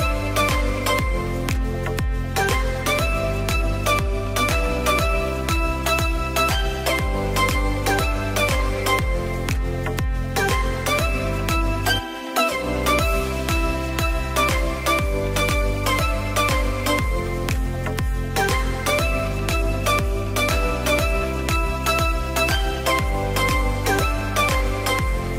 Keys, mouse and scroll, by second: 0.4 click, 1.4-3.3 drag, 3.7-5.6 middle drag, 5.6 click, 8.2 click, 11.2 click, 11.9-13.7 scroll up 5, 13.7-16.3 drag, 16.7 click, 17.0-17.5 scroll down 3, 17.5 click, 18.1-19.1 scroll down 2, 19.1 click, 21.0-21.7 drag, 21.7-24.3 drag.